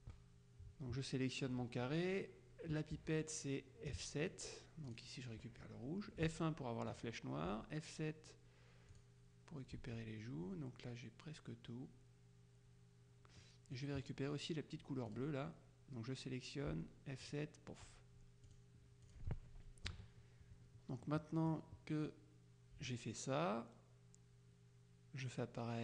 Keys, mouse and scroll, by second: 3.0 F7, 4.9 click, 6.3 F1, 7.0 click, 7.5 F7, 9.0 click, 9.8 F1, 13.5 click, 15.2 click, 16.8 F7, 17.3 click, 18.6 click, 20.0 KP_Subtract, 21.1 click.